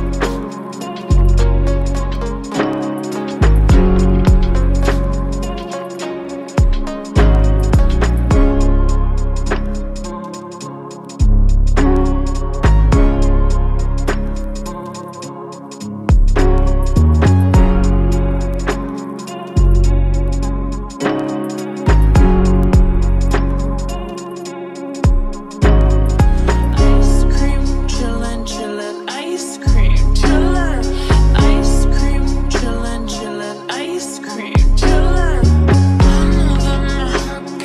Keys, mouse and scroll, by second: 1.9-3.0 typing, 19.6 alt+/, 33.4 BackSpace, 34.9-35.8 typing.